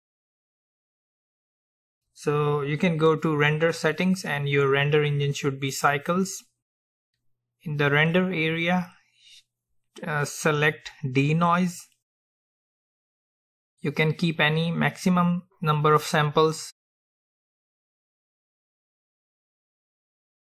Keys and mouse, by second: 1.7-3.7 drag.